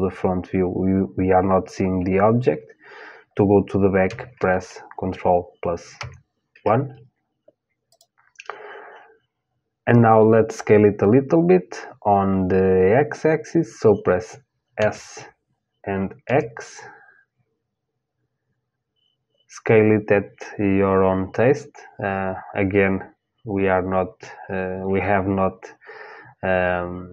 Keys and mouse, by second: 5.6 ctrl+KP_1, 7.5-14.4 drag, 14.4 s.